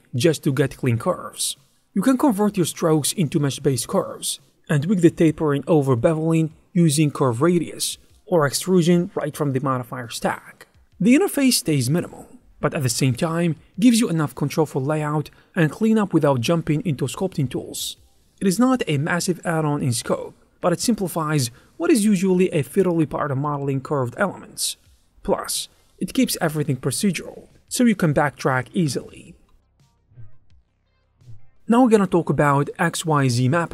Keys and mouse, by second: 1.1 click, 1.7 shift+middle click, 1.9 middle click, 2.8 e, 3.9 click, 4.7 click, 5.5 click, 6.9-9.8 typing, 7.5 Tab, 8.1 Tab, 8.5 click, 10.0 click, 10.3 shift+middle click, 10.9 Tab, 11.1 a, 11.2 right click, 12.2 1, 12.3 shift+click, 13.0 s, 13.4 click, 13.7 2, 13.8 click, 14.7 ctrl+b, 17.4 1, 18.1 x, 18.5 Tab, 20.2 click, 21.8 z, 22.8 click, 24.0 shift+a, 24.4 Tab, 24.5 s, 24.8 Tab, 25.0 g, 25.0 x, 26.8 click, 28.2 click, 29.3 click, 31.3 click.